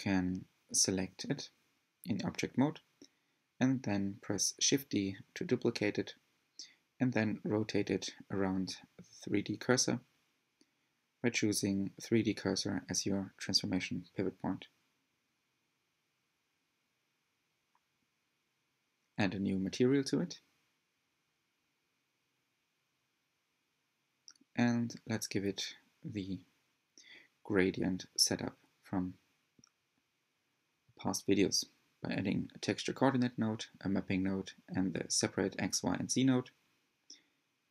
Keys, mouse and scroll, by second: 2.0 Tab, 2.3 Tab, 2.7 click, 4.2 click, 4.6-5.2 scroll up 4, 5.2 shift+d, 7.4-7.8 drag, 7.8 r, 10.9-14.7 middle drag, 14.7-15.8 drag, 15.8-18.0 middle drag, 18.0-19.7 drag, 19.7-22.2 shift+middle drag, 22.3-24.5 shift+middle drag, 28.4 shift+a, 33.4-34.0 shift+middle drag, 34.0-35.5 drag, 35.7-36.4 shift+middle drag, 36.4-36.9 drag.